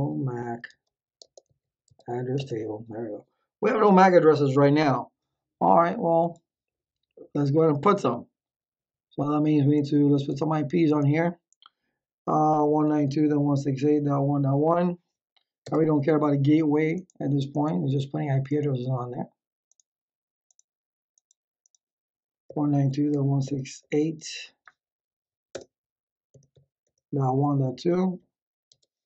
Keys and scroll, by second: 0.0-1.4 typing, 1.8 Tab, 2.3 Return, 12.4-14.9 typing, 15.6 Tab, 22.2-24.2 typing, 25.5-28.2 typing, 28.7 Tab.